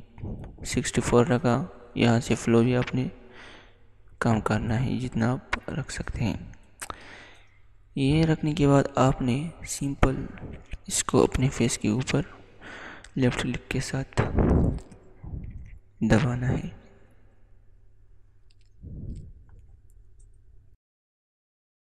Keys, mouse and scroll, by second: 1.1 click, 3.0-4.3 drag, 14.5 click, 14.7-21.8 drag.